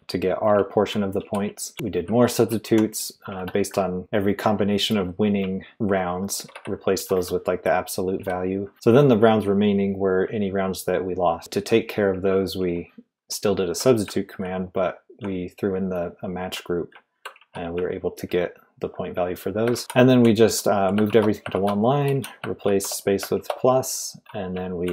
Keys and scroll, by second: 0.0-4.0 typing, 5.2-8.1 typing, 11.4-14.8 typing, 17.1-24.9 typing.